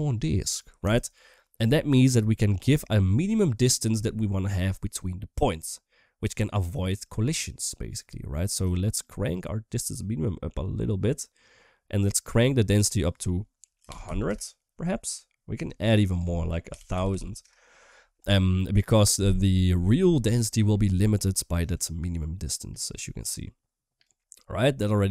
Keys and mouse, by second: 9.1-12.1 shift+drag, 12.7-14.0 drag, 14.0 0, 15.0 middle click, 16.0-17.2 drag, 17.2 0, 19.7 shift+middle drag, 20.1 middle click, 21.5-23.8 shift+drag, 24.2-25.1 middle drag.